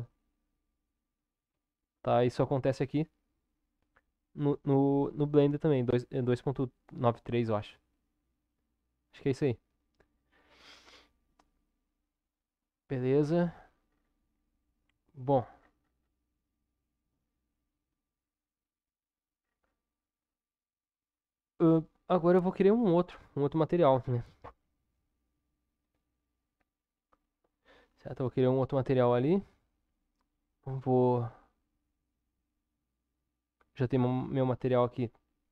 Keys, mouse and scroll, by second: 13.3 Tab, 14.4-15.4 middle drag, 16.4-19.1 middle drag, 19.1-24.8 scroll up 1, 24.8 scroll up 1, 25.4 Tab, 32.0 click.